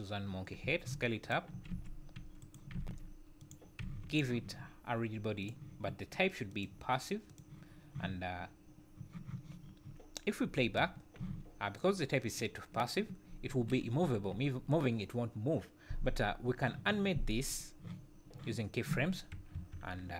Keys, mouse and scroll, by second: 0.6 s, 1.7 r, 2.7 r, 3.8 g, 5.4 click, 6.5 click, 10.6 space, 11.2 z, 13.6 Escape, 14.1 `, 17.5 click, 19.6 KP_1.